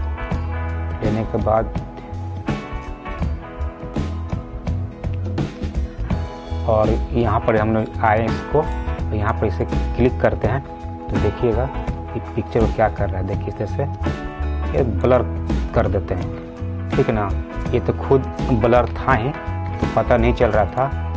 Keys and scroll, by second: 19.1 ctrl+alt+z.